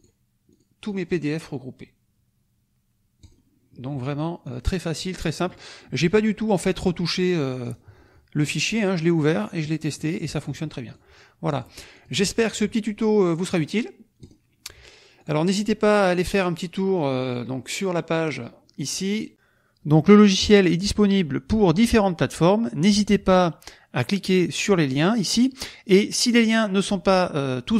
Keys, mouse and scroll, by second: 0.5 click, 3.2 click, 4.4 click, 5.3 click, 7.4-7.9 scroll down 4, 8.6 scroll down 2, 10.3 click, 10.8 click, 11.5 click, 11.9 click, 14.2 click, 15.1 click, 16.3 click, 19.5 click, 21.0 click.